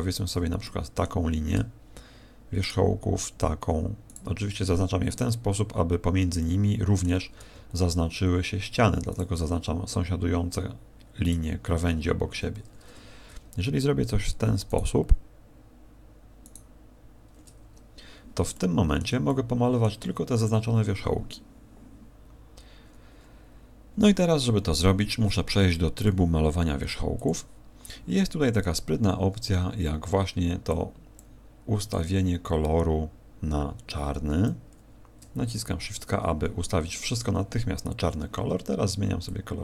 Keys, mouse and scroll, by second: 0.6 middle click, 2.8 alt+shift+right click, 4.4 alt+shift+right click, 6.4 middle click, 9.5 alt+shift+right click, 11.6 alt+shift+right click, 15.2 alt+shift+right click, 17.0 alt+shift+right click, 18.5 middle click, 19.2 middle click, 27.2 click, 30.6 click, 31.8 click, 35.8 shift+k, 39.2 click.